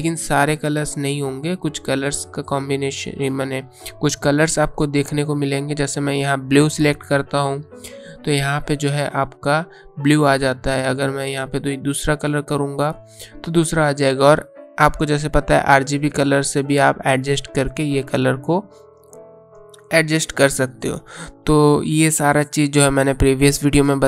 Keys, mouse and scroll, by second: 4.6 click, 11.5 click, 14.6 click.